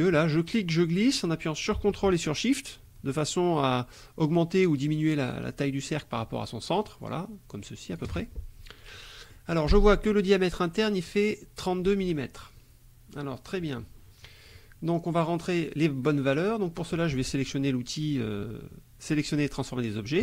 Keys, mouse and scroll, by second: 0.2-8.2 drag, 9.0 click, 10.7 click, 12.2 click.